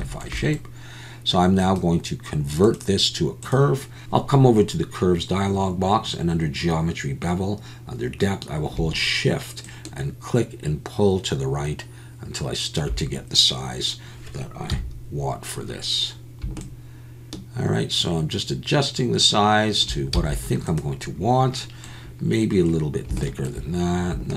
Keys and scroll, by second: 14.7 KP_1, 20.2 z.